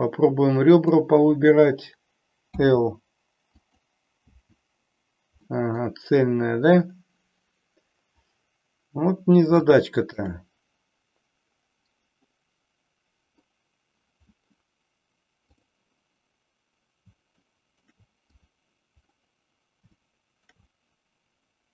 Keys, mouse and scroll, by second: 0.6 click, 2.5 l, 3.5 click, 4.3 l, 5.3 middle click, 9.7 shift+middle click, 15.6 click, 17.5 shift+middle click, 18.4 click, 20.1 shift+middle click.